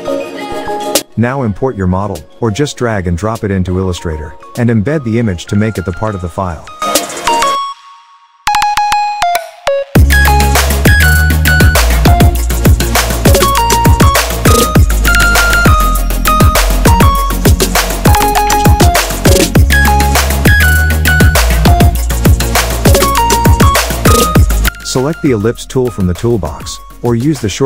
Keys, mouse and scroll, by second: 0.7 super+d, 1.3-3.3 drag, 6.9 Home, 6.9 End, 8.2 Home, 8.3 Caps_Lock, 9.0 Home, 9.2 Caps_Lock, 9.8 shift+End, 10.3 Caps_Lock, 13.2 click, 18.7 click, 20.3 click, 21.8 ctrl+shift+[, 22.4 shift+click, 22.7 right click, 23.3 click, 24.2 alt+scroll down 1, 24.5 click, 24.5-26.6 drag.